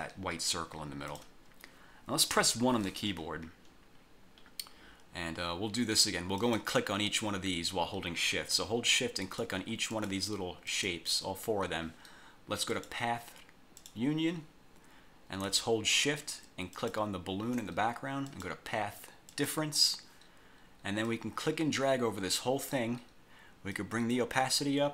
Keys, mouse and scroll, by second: 1.3 click, 2.5 1, 3.3-3.6 scroll up 2, 3.6 scroll down 2, 4.1-4.6 scroll up 2, 6.5 click, 9.4 shift+click, 10.1 shift+click, 10.8 shift+click, 12.9 click, 13.9 click, 16.9 shift+click, 18.4 click, 19.4 click, 21.2-22.7 drag, 23.9 click.